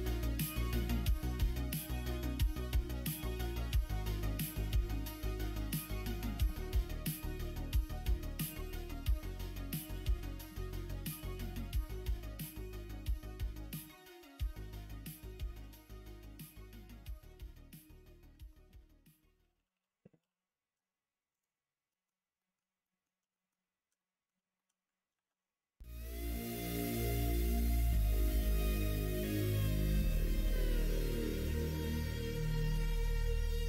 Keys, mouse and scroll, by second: 1.2 middle click, 1.7 shift+middle click, 2.2-3.3 middle drag, 3.6 2, 4.2 middle click, 5.4 click, 6.4 ctrl+b, 8.0 ctrl+z, 8.4 middle click, 9.3 ctrl+b, 10.4 1, 10.7 click, 11.5 shift+click, 12.2 m, 13.0 middle click, 14.0 click, 14.7 shift+click, 16.9-18.1 middle drag, 18.3 ctrl+z, 18.6 ctrl+z, 18.7 ctrl+z, 18.9 ctrl+z, 19.0 ctrl+z, 19.2 ctrl+z, 19.3 ctrl+z, 19.5 ctrl+z, 19.7 ctrl+z, 20.2 ctrl+z, 21.3 click, 21.8 middle click, 22.3 middle click, 22.7 shift+middle click, 23.2 middle click, 23.9 middle click, 24.5 shift+middle click, 25.1 ctrl+r, 27.6 shift+middle click, 28.4 middle click, 28.8 middle click, 29.3 2, 30.4 1, 30.6 click, 31.7 g.